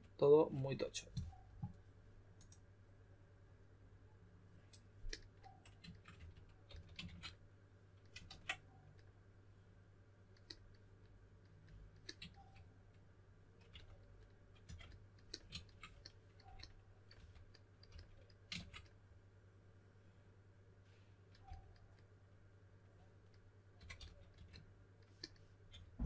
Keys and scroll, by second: 6.1-7.2 typing, 8.2 super+z, 13.7-14.6 typing, 17.1-17.9 typing, 21.4 typing, 23.5-25.7 typing.